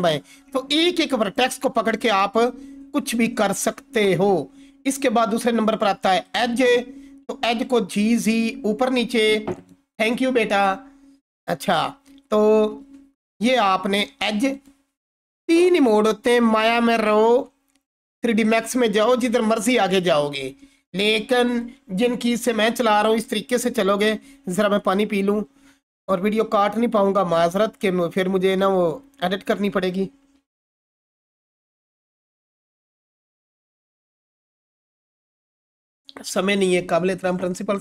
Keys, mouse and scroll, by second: 1.0-1.6 click, 1.5 g, 1.9 z, 3.5 right click, 5.2 click, 7.3 g, 7.7 z, 9.5 right click, 13.0-13.9 typing, 14.5 right click.